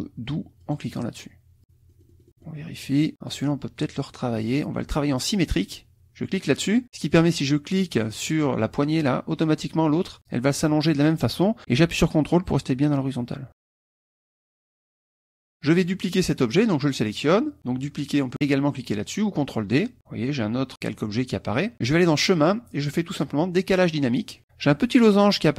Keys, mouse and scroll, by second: 0.6 click, 1.9 middle click, 3.1 click, 6.3 click, 8.6-14.6 drag, 14.6 KP_Subtract, 15.8 click, 16.8 click, 22.0 click, 24.2 click, 25.1 middle click.